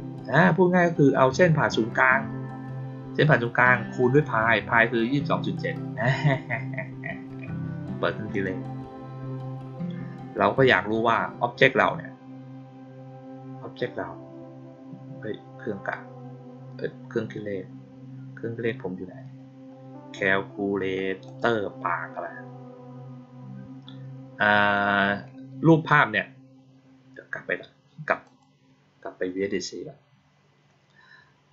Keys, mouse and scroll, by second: 8.2 click, 18.9-20.8 scroll down 5, 21.2 click, 28.2 click.